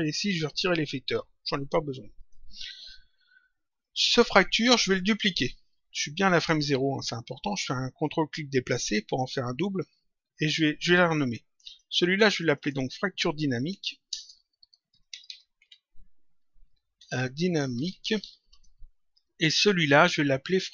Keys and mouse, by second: 1.0 Delete, 2.1 click, 3.7 click, 8.1 ctrl+click, 11.6 click, 13.7 End, 14.0-17.7 typing, 18.4 Return, 19.7 click.